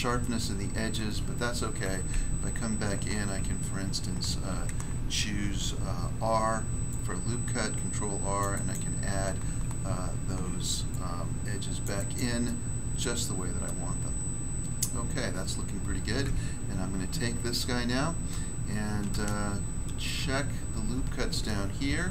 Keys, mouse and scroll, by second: 0.1 shift+middle click, 2.0 Tab, 5.3 ctrl+r, 6.8 click, 8.4 click, 8.5 click, 8.6 click, 9.8 ctrl+r, 10.9 click, 11.8 click, 11.9 click, 12.1 click, 12.4 middle click, 13.6 middle click, 16.2 Tab, 16.7 scroll down 1, 19.2 shift+middle click, 20.4 scroll up 1.